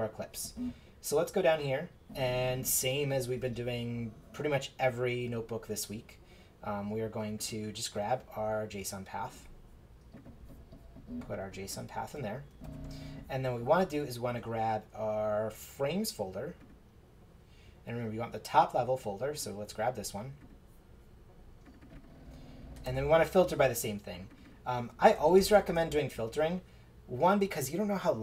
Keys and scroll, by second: 12.6 super+v, 22.8 super+v, 24.9-26.2 typing.